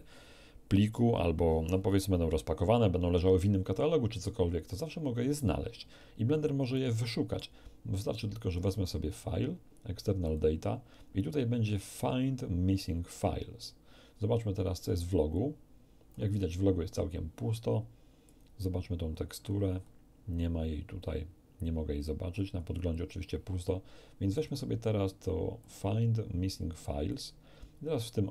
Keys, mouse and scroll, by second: 6.7 middle click, 8.5 click, 10.2 click, 15.3 click, 18.2 click, 19.0-19.6 scroll down 2, 19.8 scroll down 2, 22.3-22.7 scroll up 2, 24.3 click, 25.6 click, 27.1 click.